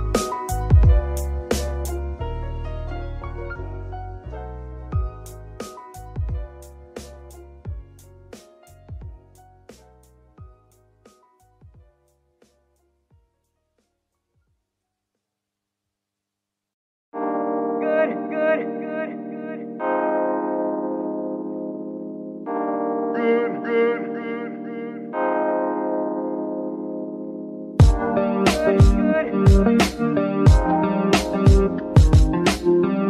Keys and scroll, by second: 29.3-31.6 typing.